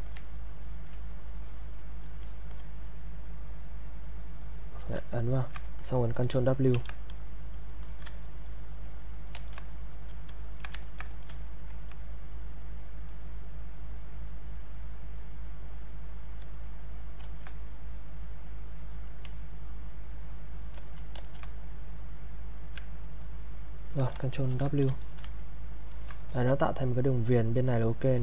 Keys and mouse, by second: 0.4 ctrl+right click, 1.4 alt+click, 5.2 ctrl+right click, 5.8 alt+click, 6.7 ctrl+w, 7.8 alt+click, 8.2 ctrl+right click, 9.3 ctrl+z, 10.4 ctrl+right click, 10.8 ctrl+click, 11.5 ctrl+right click, 17.2 ctrl+z, 18.2 click, 19.4 ctrl+right click, 20.7 ctrl+z, 22.2 click, 22.9 ctrl+right click, 24.5 ctrl+w, 25.0 alt+click, 25.0 alt+middle click, 25.4 ctrl+right click, 26.3-28.2 alt+drag.